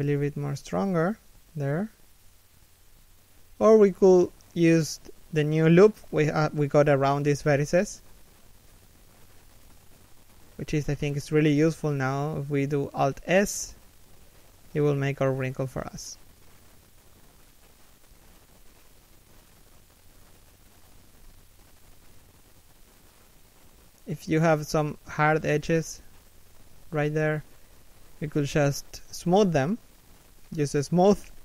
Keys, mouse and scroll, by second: 0.2 z, 0.4 alt+s, 2.8 z, 4.3 alt+right click, 7.0 middle click, 7.3 z, 7.6 middle click, 9.8 KP_1, 10.6 z, 11.3 alt+s, 15.3 scroll down 1, 15.8 middle click, 17.1 KP_3, 17.6 KP_1, 18.2 scroll up 1, 18.6 middle click, 20.6 middle click, 21.9-22.4 scroll down 1, 22.4 3, 23.1 1, 24.2 z, 24.4 scroll up 1, 25.5 z, 25.8 a, 26.1 b, 30.3 scroll down 1, 31.1 scroll up 1.